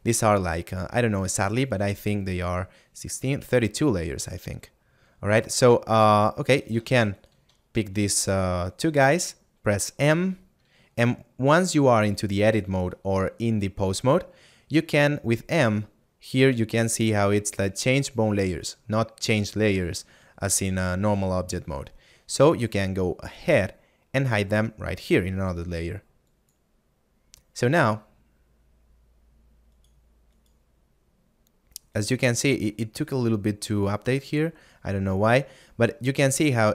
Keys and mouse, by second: 26.3 click.